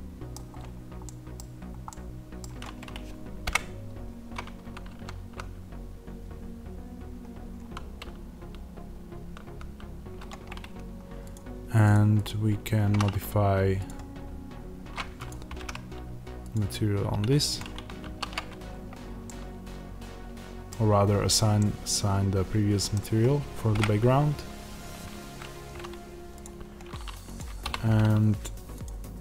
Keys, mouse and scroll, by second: 0.3 scroll down 2, 0.4 scroll up 2, 1.0 middle click, 3.5 KP_0, 5.3 z, 10.4 scroll down 1, 11.3 click, 18.6-19.2 scroll up 1, 19.2 middle click, 20.6 scroll down 1, 20.8 scroll up 1, 21.5 middle click, 23.7 KP_0, 26.4 click.